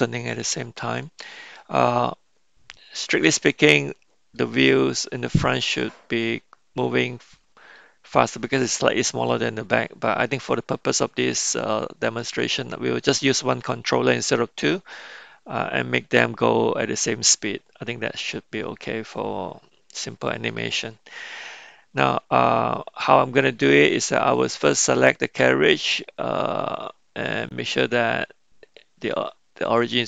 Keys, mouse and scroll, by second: 1.0-4.3 middle drag, 6.8 middle click, 8.2-9.1 middle drag, 10.1-12.4 middle drag, 18.3-20.5 middle drag, 21.1-22.1 middle drag, 24.3 click, 27.7-29.9 drag.